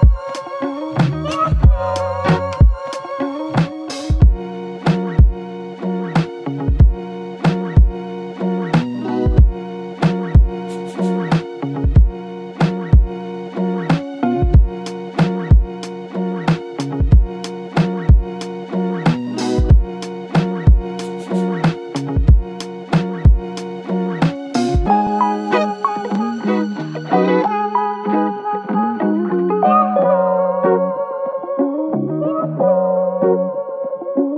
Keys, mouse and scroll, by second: 10.1 ctrl+click, 12.9 ctrl+click, 16.4 double click, 23.9 ctrl+click, 26.0 alt+click, 27.2 ctrl+click, 30.9 ctrl+click.